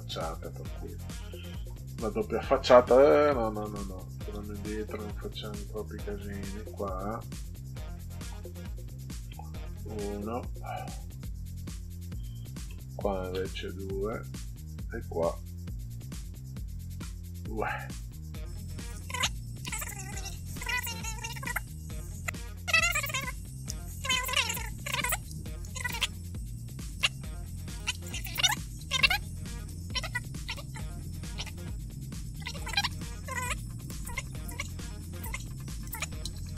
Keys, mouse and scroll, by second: 0.2 click, 1.6 1, 3.5 ctrl+z, 4.3 ctrl+z, 6.3 click, 8.4 Tab, 9.2 1, 10.9 click, 12.7 Tab, 13.3 2, 14.3 click, 17.0 2, 18.4 click, 19.7 click, 20.0 right click, 20.2 click, 20.5 click, 21.4 click, 24.8 click, 26.2 click, 27.2 click, 28.0 Tab, 28.3 3, 29.9 click, 30.2 4, 31.4 click, 33.2 click, 33.8 5, 34.0 click, 34.6 click, 35.3 click.